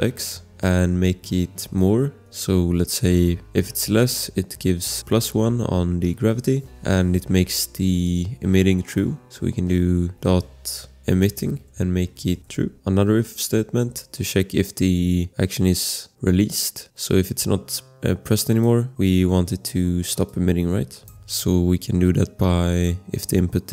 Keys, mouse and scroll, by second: 0.2 ctrl+v, 0.5 space, 0.9 Caps_Lock, 1.6 =, 2.2 space, 3.2 1, 6.5 Return, 8.0 click, 10.6-13.0 typing, 18.2 click, 20.3 click, 21.2 ctrl+v.